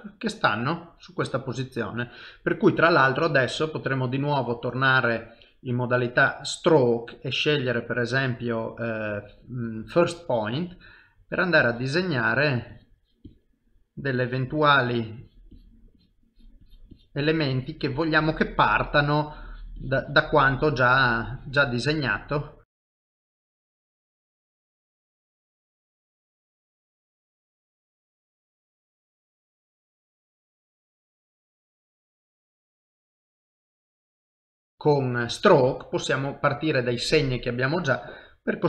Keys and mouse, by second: 3.4 click, 6.6 middle click, 7.6 click, 10.1 middle click, 11.2 click, 11.6-13.1 click, 13.5 click, 13.5 middle click, 14.2 click, 14.5 click, 16.5 click, 16.9-18.6 click, 18.6 middle click, 19.5 click, 21.6 click, 21.9 middle click, 22.7 click, 22.8 click, 23.6 click, 23.7 click, 24.4-27.3 click, 27.3 middle click, 27.7 click, 27.9 click, 28.6 click, 28.8 click, 29.4 click, 30.1 middle click, 30.6 click, 30.8 click, 31.3 middle click, 31.8 middle click, 33.0 click, 33.5 click, 33.9 middle click, 34.7 middle click.